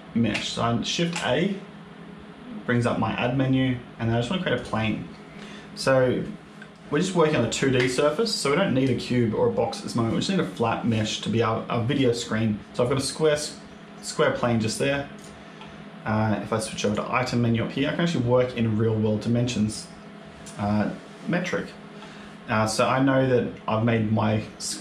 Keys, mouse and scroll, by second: 0.2 shift+a, 12.6 click, 12.8 click, 13.2 middle click, 15.0 click, 16.7 click.